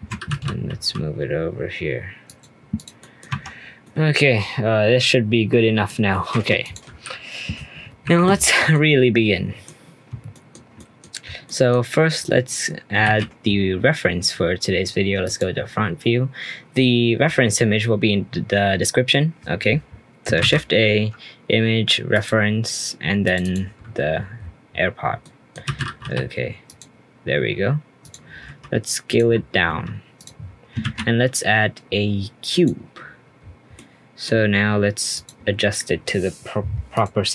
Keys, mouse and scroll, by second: 0.3 g, 2.7 click, 3.0 middle click, 3.2-3.8 scroll down 3, 3.8-6.6 middle drag, 6.6 click, 8.0 Delete, 8.4-8.7 scroll down 1, 8.7-13.0 middle drag, 13.0 shift+a, 15.2 click, 20.4 shift+a, 25.0 scroll down 10, 25.2 middle click, 25.6 g, 28.0 click, 28.4 s, 29.3-29.6 scroll up 3, 29.6 s, 30.3-30.8 scroll up 1, 30.8 shift+a, 33.2 scroll down 1, 33.4-33.7 scroll up 3, 33.7 middle click, 34.3-35.1 scroll up 1, 35.1 click, 36.9 click.